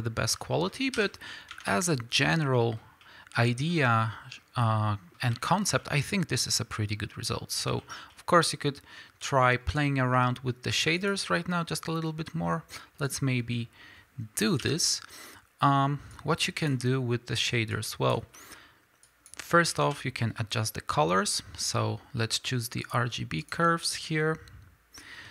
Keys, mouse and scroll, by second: 0.9 KP_5, 1.5 Tab, 9.9-11.9 scroll down 2, 11.9-16.3 scroll down 1, 16.3-19.1 drag, 23.2 shift+a, 23.5 click, 24.9-25.3 scroll up 1.